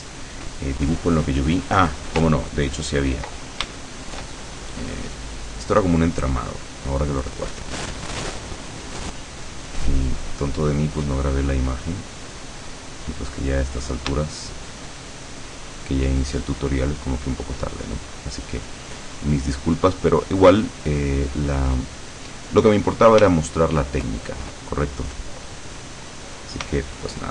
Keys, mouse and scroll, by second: 2.5-3.3 ctrl+middle drag, 3.9-4.5 ctrl+shift+middle drag, 5.6 click, 8.7 click, 10.3 click, 11.5 click, 13.3 click, 14.4-15.1 shift+middle drag, 16.7 click, 18.0 click, 19.4 click, 20.6 click, 21.9 click, 23.5-24.3 shift+middle drag.